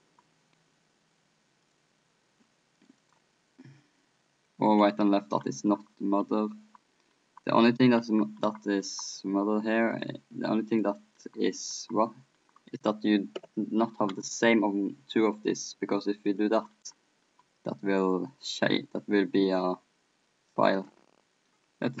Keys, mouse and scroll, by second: 0.1-4.8 middle drag, 5.4-14.8 middle drag, 10.0-12.4 drag, 10.0-12.4 right drag, 12.9-14.4 drag, 12.9-14.4 right drag, 15.4-18.0 middle drag, 18.7-22.0 middle drag.